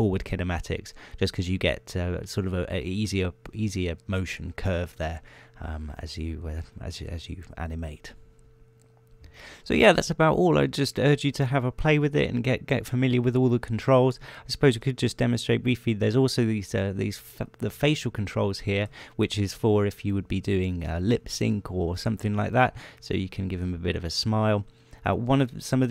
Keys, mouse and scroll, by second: 0.0-1.6 drag, 1.7 middle click, 6.8 middle click, 7.5 middle click, 8.2 middle click, 9.0 scroll down 1, 15.5-15.8 scroll up 1, 16.0 shift+middle click, 18.3 click, 19.0 middle click, 19.5-20.4 shift+scroll up 1, 21.5-21.8 scroll up 1, 23.3 g, 24.1-24.8 scroll up 2, 25.0 g, 25.6-25.9 scroll up 1.